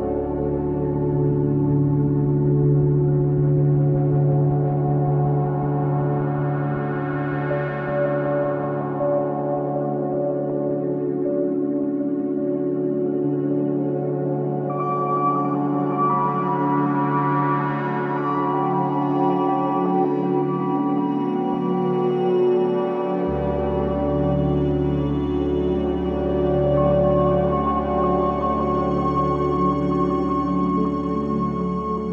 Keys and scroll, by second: 3.1 ctrl+z, 5.6 Delete, 6.7 ctrl+z, 9.1 Delete, 11.1 shift+i, 13.4 Delete, 13.9 shift+i, 14.9 shift+i, 15.7 Delete, 16.9 shift+i, 19.9 f.